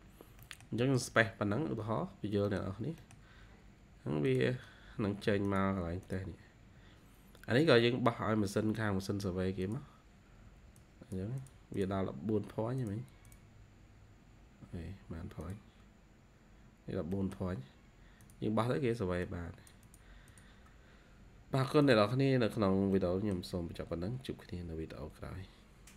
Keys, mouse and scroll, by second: 0.0 scroll down 3, 0.3 middle click, 0.7 space, 1.1 scroll down 1, 1.9-2.3 scroll up 3, 2.3 middle click, 2.9 middle click, 11.6 double click, 13.2 double click, 16.6-17.0 scroll down 2, 17.1 middle click, 20.2 double click, 22.9 middle click, 23.8 scroll up 1.